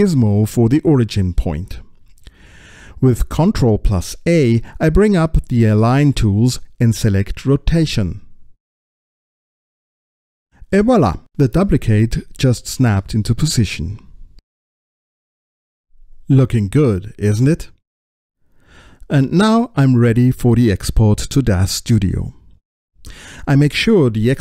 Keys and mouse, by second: 1.1-2.2 drag, 7.5 ctrl+a, 18.7-20.0 middle drag, 21.0 click, 21.8-23.6 drag.